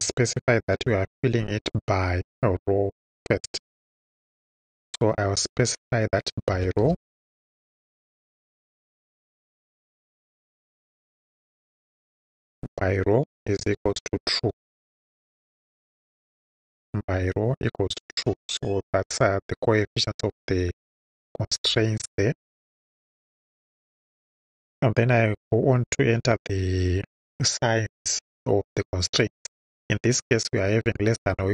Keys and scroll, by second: 0.8 ,, 6.6 b, 6.8 y, 9.8-11.2 typing, 12.6-15.2 typing, 16.3 shift+e, 17.5 Right, 21.6 Return.